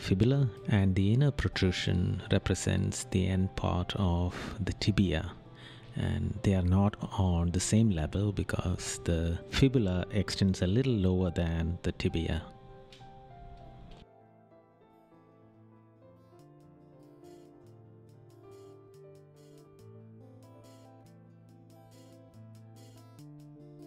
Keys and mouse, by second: 0.5 right click, 1.5 right click, 4.1 right click, 4.7 right click, 5.4 right click, 7.6 right click, 8.6 right click, 9.8 right click, 16.7 right click, 17.4 right click, 18.9 right click, 19.7 right click, 21.7 right click, 23.0 right click.